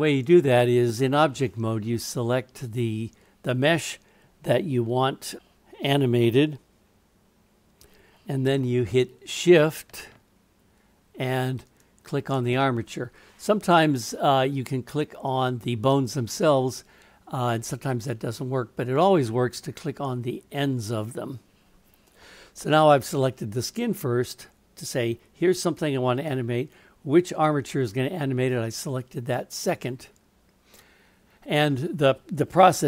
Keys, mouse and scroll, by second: 2.7 click, 11.6 shift+click.